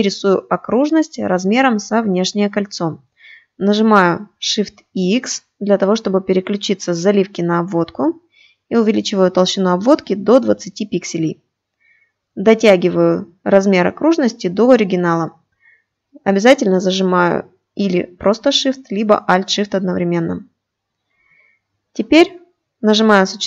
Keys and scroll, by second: 3.5 shift+x.